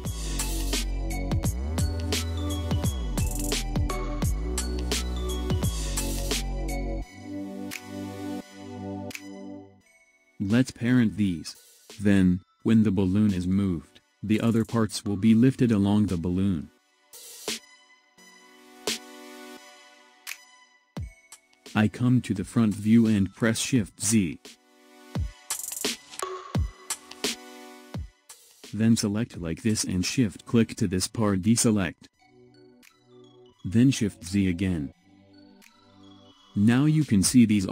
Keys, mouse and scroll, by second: 1.6 ctrl+z, 3.1 click, 3.8-7.0 middle drag, 8.4 scroll up 2, 9.9-10.4 scroll down 2, 10.4-13.5 middle drag, 17.6 click, 19.2 click, 22.2 KP_1, 23.1-25.4 scroll up 1, 25.4 shift+z, 26.6-26.9 drag, 30.7 shift+click, 35.0 shift+z, 36.2-37.7 middle drag.